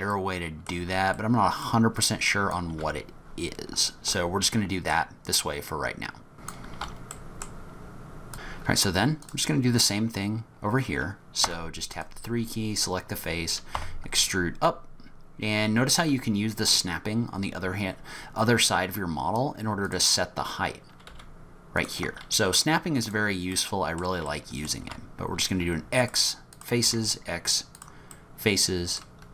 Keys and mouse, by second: 0.1 click, 0.2 middle click, 0.3 click, 0.4 middle click, 0.9 f, 1.3 middle click, 2.0 click, 2.7 f, 4.1 middle click, 4.4 click, 4.5 middle click, 6.3-8.2 typing, 6.5 click, 6.6 click, 6.7 click, 6.9 ctrl+z, 7.0 click, 7.3 shift+click, 7.4 shift+click, 7.5 middle click, 7.6 click, 7.7 click, 8.7 middle click, 9.2 click, 11.5 3, 13.7 e, 21.1 e, 23.0 click, 23.5 middle click, 24.3 middle click, 24.8 x, 26.5 middle click, 26.9 x, 28.1 middle click.